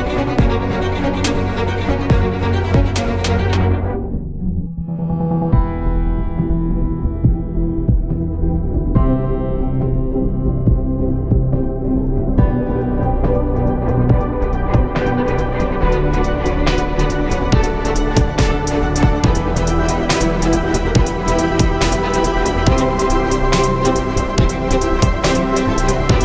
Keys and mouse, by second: 1.2 Tab, 3.4 Tab, 7.1 s, 7.6 middle drag, 11.5-14.6 typing, 15.3 Tab, 16.0 Tab, 17.3 s, 19.2 z, 20.9 z.